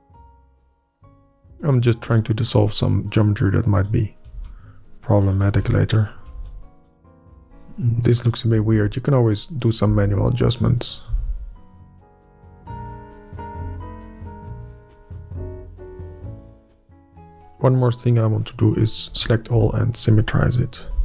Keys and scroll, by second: 0.9 shift+Up, 1.4 Up, 4.3 ctrl+x, 5.5 ctrl+x, 6.0 Up, 6.3 ctrl+x, 6.9 Up, 7.2 ctrl+x, 7.8 Up, 8.5 Up, 8.7 Up, 10.0 Up, 10.6 Up, 11.1 Up, 11.2 Up, 11.8 Up, 12.4 Up, 12.6 Up, 12.9 ctrl+z, 13.1 Up, 13.6 Up, 14.0 ctrl+z, 14.1 Up, 14.7 Up, 15.3 Up, 15.9 Up, 16.4 Up, 19.1 Up, 20.1 Up, 20.8 Up.